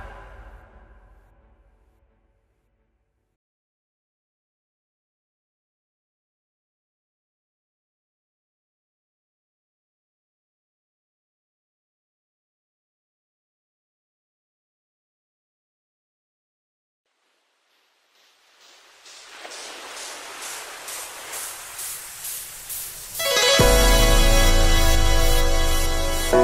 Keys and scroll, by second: 20.8 ctrl+e, 23.2 ctrl+e.